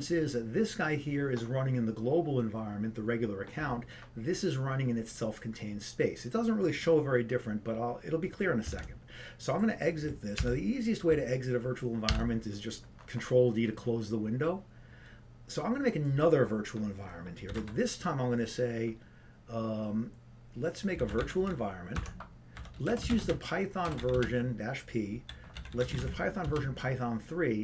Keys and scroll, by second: 24.1 Tab, 24.1 typing.